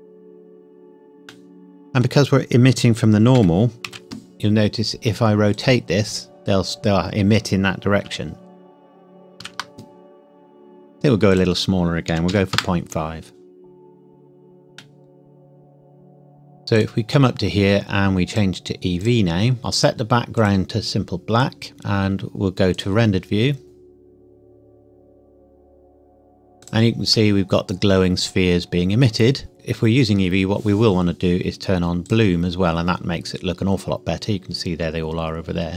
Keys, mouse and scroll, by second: 3.3 r, 3.8 x, 5.5 click, 9.6 ctrl+z, 11.3 click, 11.4 click, 12.1 KP_Decimal, 12.3 KP_5, 12.5 KP_Enter, 14.9 middle click, 16.7 click, 17.6 scroll up 1, 18.3 click, 22.7 click, 26.6 click, 27.1 middle click, 29.5 click, 32.0 click, 33.8-34.2 scroll down 1, 34.4-35.4 scroll up 1.